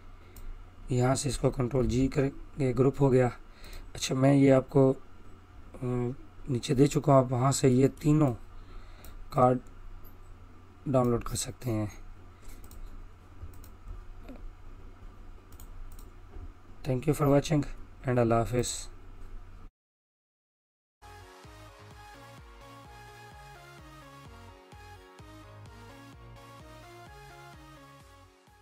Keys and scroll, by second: 2.9 ctrl+g.